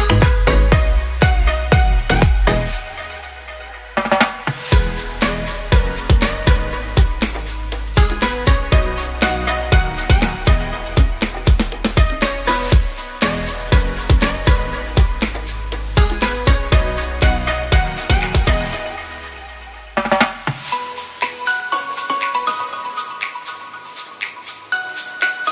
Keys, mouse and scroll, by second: 4.8 click.